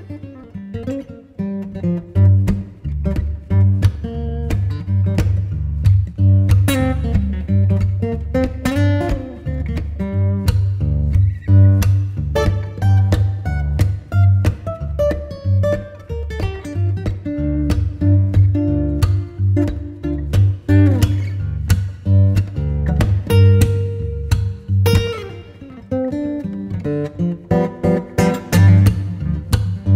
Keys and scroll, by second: 1.8 Escape, 9.0 space, 9.5 c, 9.8 Escape, 15.5 c, 15.8 Escape, 16.1 F4, 18.0 F2, 18.7 Escape, 27.2 alt+c, 27.3 alt+w, 27.8 p.